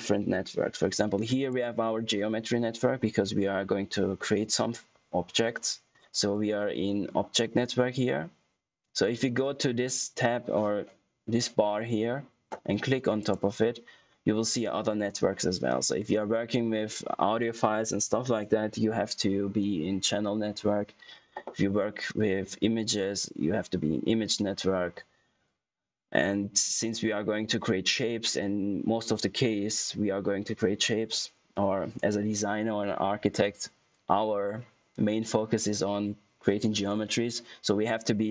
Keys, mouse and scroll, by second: 2.6 click, 13.1 click.